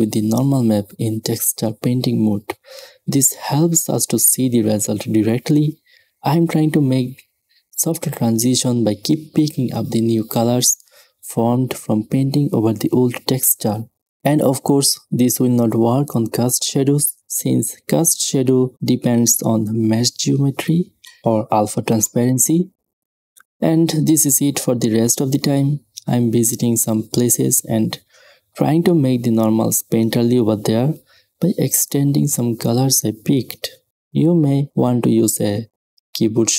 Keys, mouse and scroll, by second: 0.0 shift+z, 0.6 middle click, 3.5 middle click, 4.8 shift+z, 5.5 middle click, 8.5 s, 10.3 s, 11.2 s, 14.1 middle click, 14.5 shift+space, 14.9 middle click, 15.7 s, 16.6 s, 17.9 f, 18.7 s, 19.4 middle click, 19.7 s, 20.9 s, 22.5 middle click, 22.9 f, 23.5 s, 24.3 s, 24.6-26.5 drag, 27.6 s, 30.7 s, 32.0 s, 33.9 s, 34.9 s, 35.8 middle click, 36.4 s.